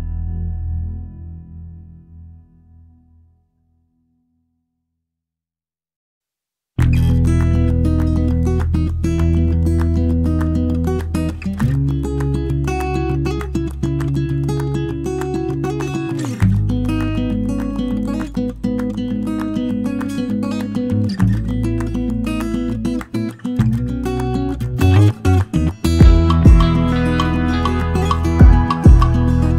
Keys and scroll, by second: 12.8 ctrl+j, 16.0 shift+Up, 16.4 shift+Up, 21.6-23.9 Up, 24.1 Up, 24.3 Up, 24.4 Up, 24.5 Up, 24.8 Up, 25.1 Up, 25.1 Up, 25.5 Up, 25.7-26.1 Up, 26.5 Down, 26.6 Down, 26.8 Down, 26.9 Down, 27.1 Down, 27.3 Down.